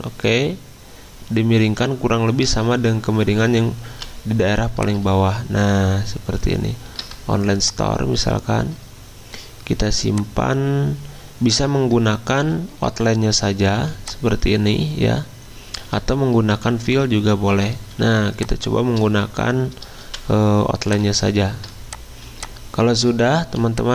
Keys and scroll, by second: 3.9 v, 12.4 x, 13.7 z, 16.9 x, 17.5 x, 20.0 v, 22.2 z, 23.5 v.